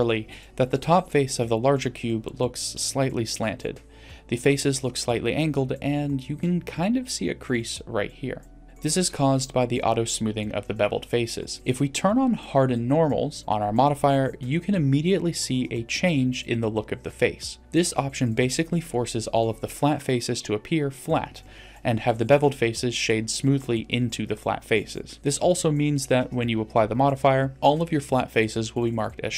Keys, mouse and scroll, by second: 0.5 middle click, 1.0-1.5 scroll down 2, 1.5-3.0 middle drag, 3.3 scroll up 2, 4.7 middle click, 4.7 d, 5.2 click, 5.9 d, 6.2 d, 6.7 d, 6.8-7.9 drag, 7.8 d, 8.2 d, 8.6 right click, 8.7 click, 8.7 d, 10.7-12.6 middle drag, 14.6 click, 17.1-18.1 middle drag, 18.4-19.0 scroll up 1, 20.1 click, 21.1 click, 21.7 middle click, 23.5-24.3 middle drag.